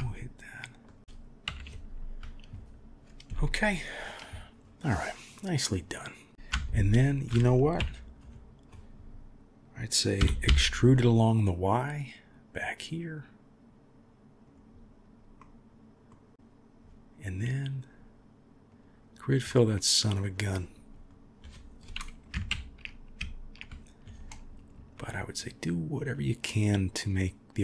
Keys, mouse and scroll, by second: 1.4 KP_1, 5.3-6.3 middle drag, 6.6 alt+click, 7.8 KP_3, 10.2 e, 15.4 middle click, 17.7-18.8 drag, 19.5 middle click, 22.5 ctrl+KP_1, 24.9 click, 25.9 click, 26.5 click, 27.1 click.